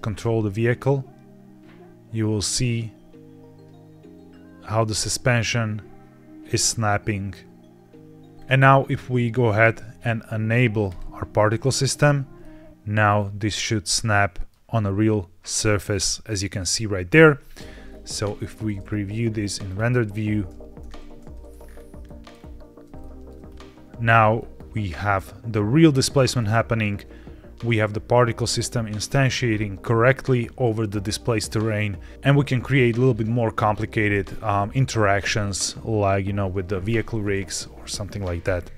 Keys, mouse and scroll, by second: 8.3 Escape, 8.3 ctrl+Tab, 8.3 click, 9.5-9.9 scroll down 2, 11.0 click, 11.8 click, 12.3-12.9 middle drag, 12.9 scroll down 2, 13.4-14.4 middle drag, 15.3 middle click, 16.3-16.6 middle drag, 16.6-17.0 scroll down 1, 17.0-17.8 scroll up 2, 17.8 scroll down 1, 18.1 z, 19.6 click, 20.8 ctrl+s, 21.6 scroll up 2, 21.9 middle click, 22.3 scroll down 1, 22.9 shift+middle click, 23.4 scroll down 1, 24.3 middle click, 26.3 middle click, 29.4 middle click, 31.1 middle click, 32.1 click, 36.0 w, 36.7 Escape, 38.3 c.